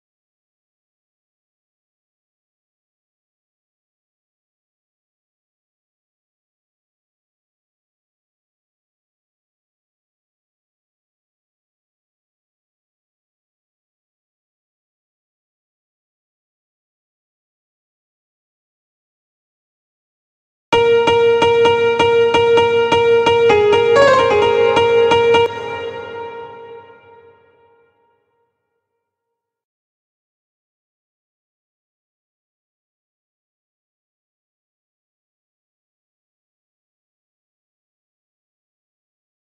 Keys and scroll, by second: 24.8 space.